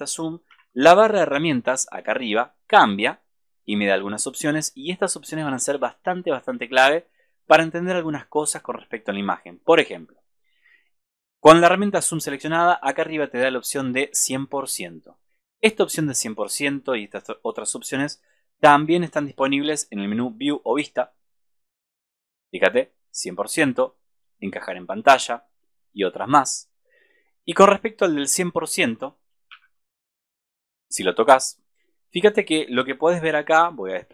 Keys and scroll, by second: 29.6 super+-.